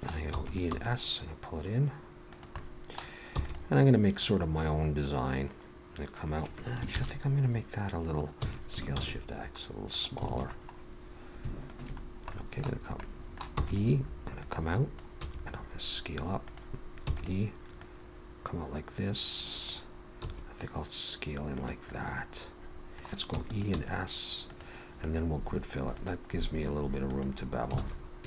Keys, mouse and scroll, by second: 0.3 e, 0.7 s, 2.6 middle click, 3.4 e, 4.2 click, 6.9 ctrl+KP_Add, 8.4 s, 10.3 alt+a, 10.6-11.4 scroll up 1, 11.4 scroll up 2, 11.7 alt+shift+click, 12.1-13.0 scroll down 2, 12.3 middle click, 13.0 middle click, 13.6 e, 14.4 click, 15.2 s, 17.0 e, 17.8 click, 20.2 s, 21.9 middle click, 23.3 ctrl+z, 23.3 e, 23.5 middle click, 23.8 s, 26.0 click, 27.8 alt+a.